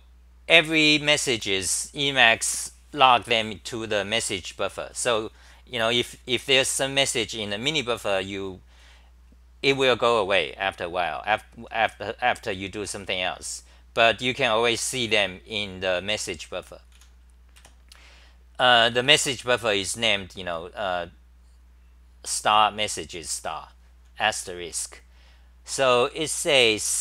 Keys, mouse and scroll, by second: 5.9 typing, 14.8 typing, 16.9 t, 17.6 2, 18.9 ctrl+g, 24.7 t.